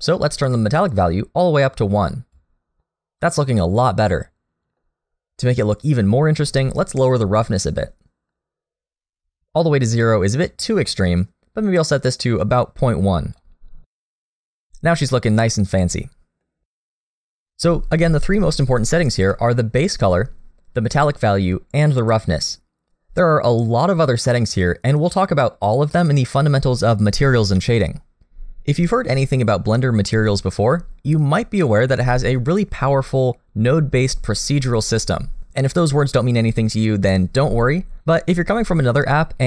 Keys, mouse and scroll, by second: 1.0 click, 2.8 middle click, 7.4 click, 14.1 middle click, 16.2 middle click, 19.1 scroll down 1, 19.3 middle click, 23.2-24.4 scroll down 1, 24.4-25.1 scroll down 4, 26.3-28.2 scroll up 1.